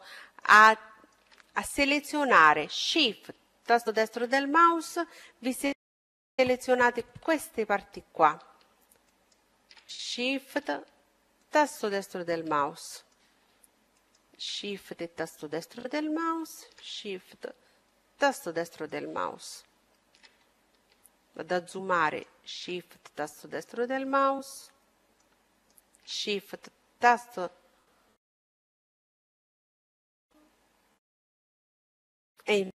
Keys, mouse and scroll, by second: 0.3-2.0 middle drag, 3.1-4.9 right drag, 4.6-6.7 middle drag, 5.0 right click, 6.8-8.3 middle drag, 7.9-9.8 right drag, 8.7-10.5 middle drag, 10.4-12.1 right drag, 11.4 middle click, 11.9-13.2 middle drag, 12.8-14.7 right drag, 13.6-15.3 middle drag, 15.3-17.3 right drag, 16.9-21.1 middle drag, 21.1-23.1 right drag, 22.0-25.9 middle drag, 25.1-27.0 right drag, 26.1-30.1 middle drag.